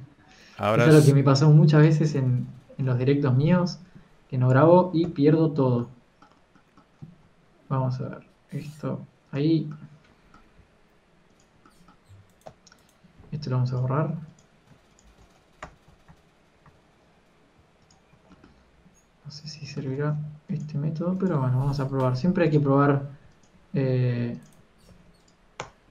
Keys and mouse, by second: 2.6 shift+a, 3.0 alt+g, 5.9 KP_Decimal, 8.1 Tab, 8.5 alt+s, 14.4 x, 16.5 ctrl+KP_Add, 16.8 ctrl+KP_Add, 17.0 ctrl+KP_Add, 17.4-20.5 ctrl+KP_Add, 18.6 x, 18.8 Tab, 20.7 Tab, 21.7 e, 23.3 alt+m, 24.7 e, 25.5 alt+m.